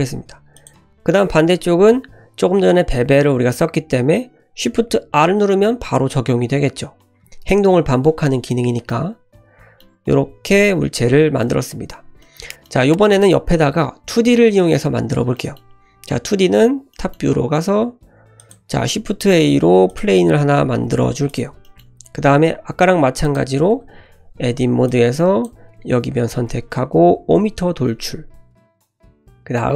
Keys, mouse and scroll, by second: 0.5 click, 1.1-2.3 middle drag, 2.3 click, 5.1 shift+r, 8.9-10.1 middle drag, 10.1 scroll down 1, 10.3 Tab, 10.6-11.4 middle drag, 11.4-12.2 scroll down 1, 12.2-12.6 middle drag, 13.0 shift+middle drag, 15.3-15.6 middle drag, 16.4 `, 16.9-17.9 shift+middle drag, 18.4 click, 18.8 shift+a, 20.4 g, 21.6 shift+middle drag, 22.2-23.2 scroll up 1, 23.2 click, 23.7 Tab, 24.5 1, 24.8 click, 25.8-26.2 scroll down 2, 26.2 g, 28.3-28.7 scroll up 2, 28.6 shift+middle click.